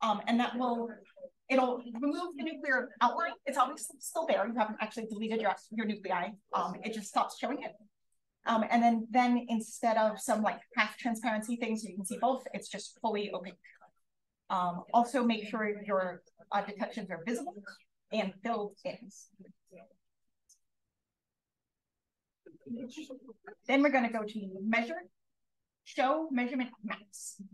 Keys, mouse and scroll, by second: 21.4 click, 25.5-26.2 scroll up 2, 26.2-27.5 scroll up 1.